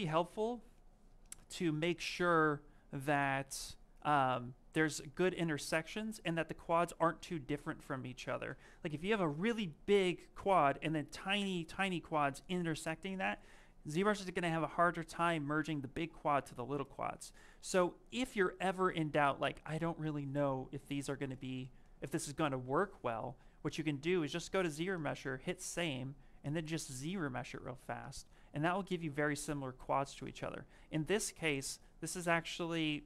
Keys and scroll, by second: 6.7 ctrl+z, 7.0 ctrl+z, 7.4 ctrl+z, 30.1 ctrl+z.